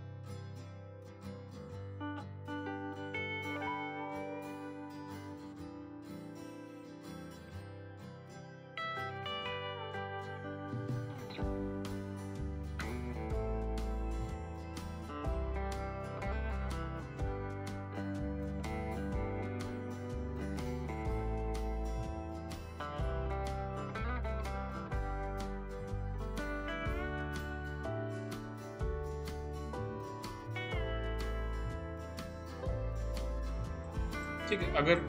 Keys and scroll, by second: 32.9 w.